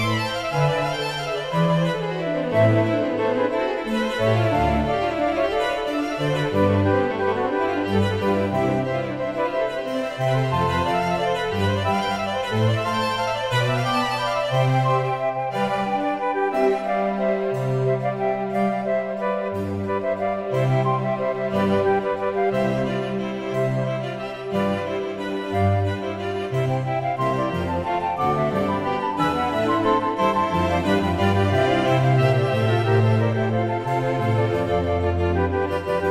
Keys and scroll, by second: 5.6 Return, 29.6 Return.